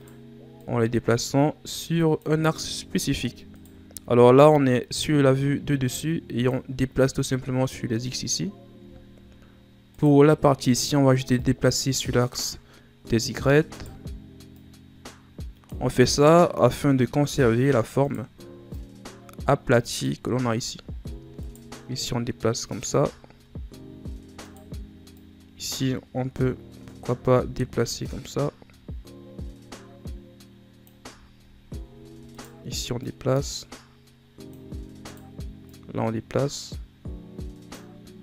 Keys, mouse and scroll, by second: 0.6-2.8 drag, 2.8-3.5 ctrl+scroll up 4, 3.5 right click, 4.5 click, 8.5-9.3 scroll down 8, 9.3-9.9 scroll up 2, 9.9 right click, 11.4-13.1 drag, 13.1-13.7 shift+scroll down 1, 13.7 right click, 14.6-16.8 drag, 16.8-17.8 shift+scroll down 9, 18.0 right click, 18.7-20.8 drag, 20.8-21.4 shift+scroll down 3, 21.4 right click, 22.0-23.1 drag, 23.1-23.4 shift+scroll down 2, 24.4 right click, 25.1-28.1 drag, 31.2-31.9 shift+scroll down 3, 31.9-32.3 ctrl+scroll down 2, 32.3 right click, 33.0-35.0 drag, 35.0 right click, 35.6-38.2 drag.